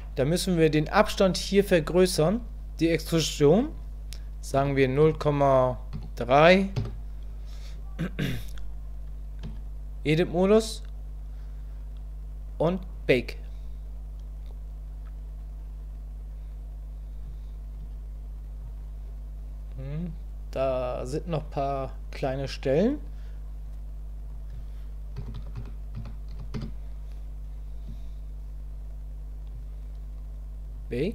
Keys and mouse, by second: 3.6-8.3 drag, 9.6 Tab, 17.9 Tab, 24.2-27.5 drag, 28.0 Tab.